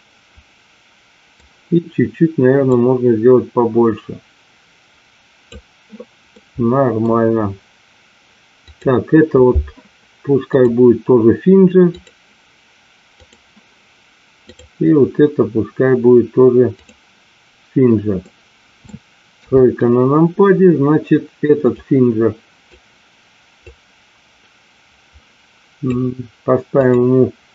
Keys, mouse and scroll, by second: 0.0-1.4 middle drag, 2.6-5.3 drag, 6.3 middle click, 10.6-12.1 drag, 13.2 click, 14.4 click, 16.7 click, 18.4 middle click, 19.4 KP_3, 21.6-23.1 drag, 23.6-26.3 drag, 26.7-27.5 drag.